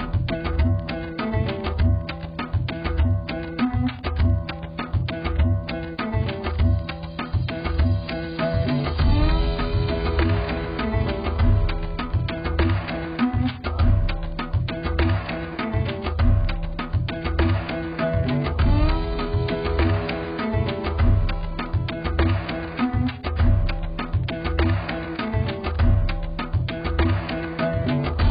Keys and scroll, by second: 26.8 ctrl+j.